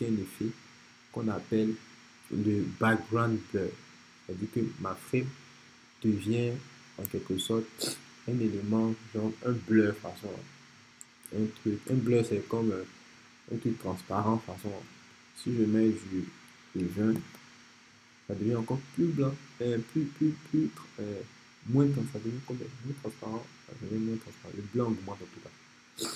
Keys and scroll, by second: 16.4-17.3 typing.